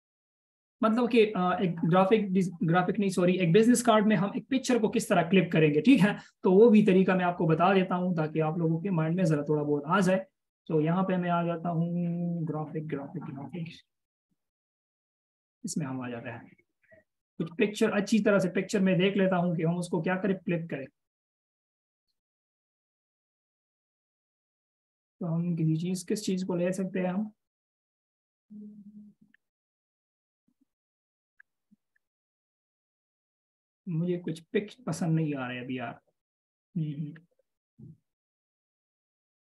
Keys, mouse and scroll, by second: 9.6 double click, 15.6 double click, 21.0-22.4 scroll down 1, 23.7-24.5 ctrl+scroll up 1, 24.5 scroll down 1, 25.4 scroll up 1, 26.0-26.4 scroll down 1, 27.4-29.4 scroll up 1, 29.4-29.9 scroll down 1, 31.4-31.8 scroll down 1, 32.4-33.3 scroll up 1, 33.3-33.6 scroll down 1, 34.0 scroll down 1, 34.6-35.2 scroll down 1.